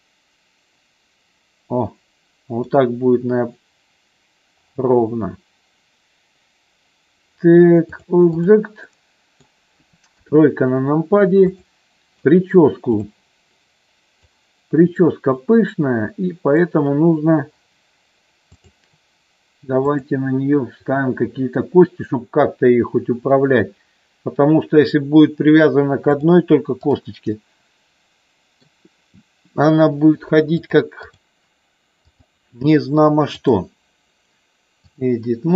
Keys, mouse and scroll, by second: 7.9 click, 8.9 middle click, 10.2 KP_3, 11.5 click, 12.9 click, 14.2-16.7 drag, 18.7 click, 20.1-24.8 drag, 26.2 click, 27.3-28.7 middle drag, 30.7 click, 32.1 click, 33.5-34.9 drag.